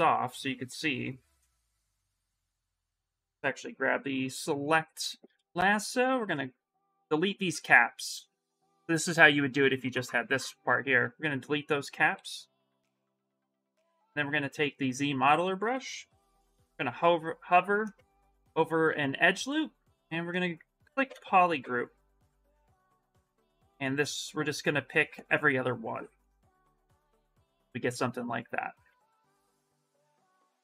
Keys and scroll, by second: 7.3 2, 11.9-14.3 typing, 15.9 shift+d, 17.9 shift+m, 18.3 shift+m, 19.0 space.